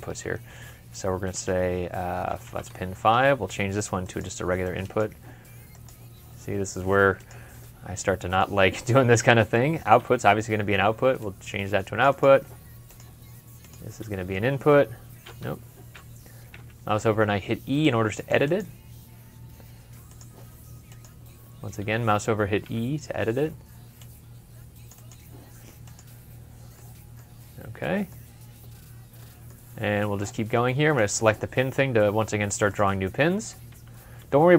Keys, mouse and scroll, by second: 2.3 ctrl+5, 7.5 middle click, 10.1 typing, 15.3 Escape, 16.7 typing, 22.5 e, 26.6 middle click, 27.2 scroll up 1, 28.1-28.5 scroll down 1, 29.0-30.5 scroll down 1.